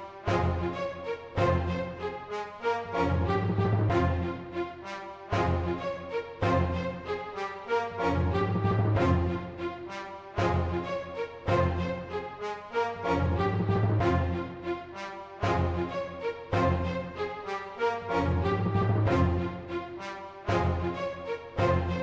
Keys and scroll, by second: 0.0-0.8 typing, 2.3 super+8, 2.5-3.5 typing, 5.1 super+8, 5.4-8.1 typing, 7.5 Left, 7.6 Left, 12.1 super+8, 12.4-13.4 typing, 14.4 super+8, 14.8-22.0 typing, 17.4 super+8.